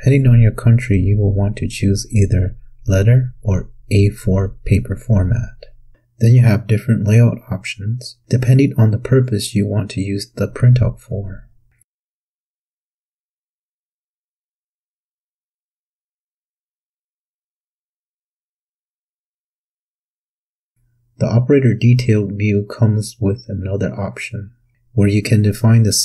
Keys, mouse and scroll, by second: 4.0 click, 5.9 click.